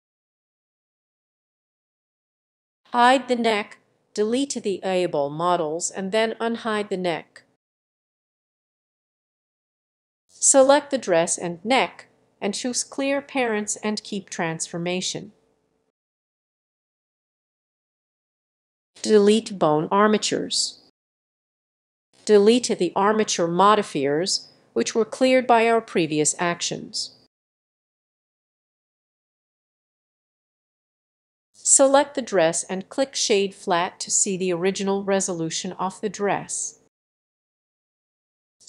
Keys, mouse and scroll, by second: 0.2 click, 0.8-6.4 drag, 6.6-8.5 drag, 8.5-9.8 scroll down 1, 9.8-13.8 drag, 13.8 right click, 16.1-18.7 drag, 18.7 middle click, 18.9-27.9 drag, 28.1-29.4 scroll down 7, 29.4-30.5 scroll down 1, 30.5-31.3 scroll up 4, 31.9 a, 32.7-35.7 drag, 35.7 middle click, 36.2 click, 36.7 middle click, 37.2-38.6 drag.